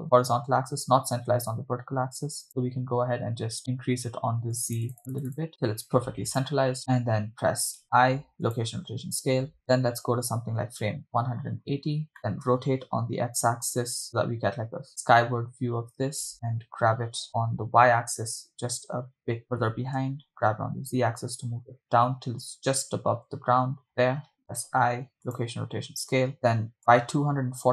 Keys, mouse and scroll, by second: 2.5 click, 3.6-5.7 click, 5.5-6.7 drag, 7.9 i, 11.7 click, 12.2 Left, 12.2 Right, 12.8 r, 13.3 x, 16.3 click, 17.3 g, 18.3 y, 19.5 click, 20.2 g, 20.8 z, 24.0 drag, 24.8 i, 27.1 click.